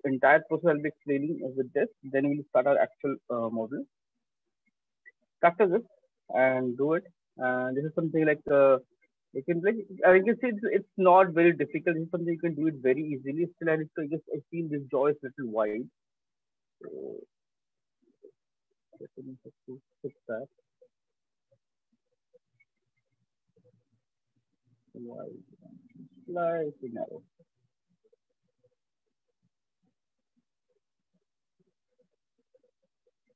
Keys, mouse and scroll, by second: 7.7 click, 8.6 right click, 9.0 alt+click, 10.8 shift+click, 15.3 alt+click, 16.3-18.1 right click, 17.2 right click, 18.1 click, 18.2 click, 18.3 click, 19.2 shift+click, 20.4-21.6 click, 21.5-23.4 drag, 25.5 click, 26.5 alt+click, 27.9 click, 29.1 click, 30.1 click, 30.9 click, 31.5 alt+click, 32.5 click.